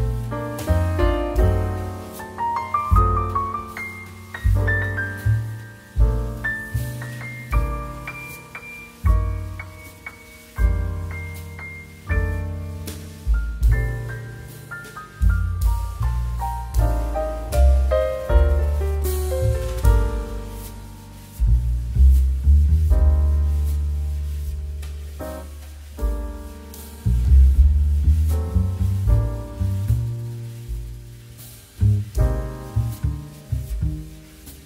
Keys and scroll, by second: 0.0 2, 14.2 2, 21.4 Return, 21.4 KP_1, 21.4 KP_0, 22.1 space, 32.5 space.